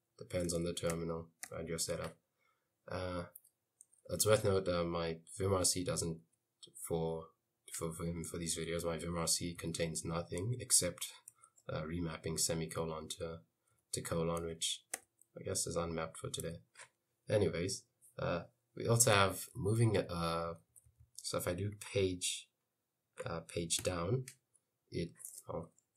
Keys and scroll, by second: 0.7 Escape, 1.0 j, 1.5 j, 2.0 k, 4.2 j, 4.6 k, 6.3 j, 9.3 j, 9.6 k, 11.4 ;, 13.3 j, 13.8 ;, 14.5 j, 15.0 j, 16.5 k, 19.5-21.3 typing, 23.9 Page_Down, 24.9 Page_Down.